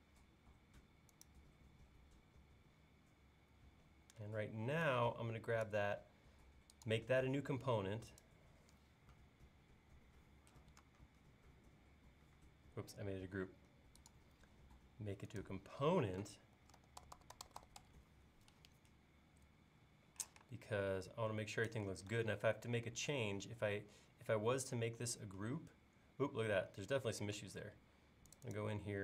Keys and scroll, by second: 16.6-17.8 typing, 20.3 m, 27.4 space.